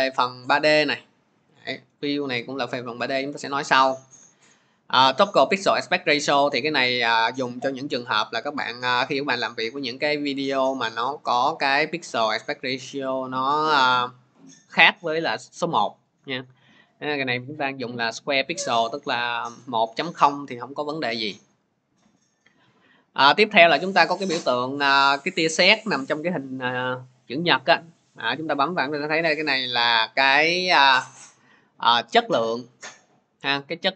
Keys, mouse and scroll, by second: 0.0 click, 1.5 click, 18.4 click, 28.0 click, 33.1-33.9 drag.